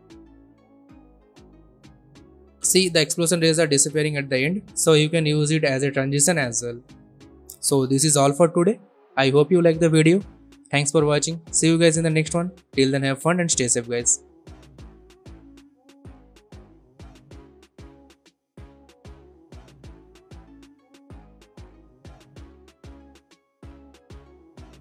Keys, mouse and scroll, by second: 8.3 Delete, 9.5-12.9 drag.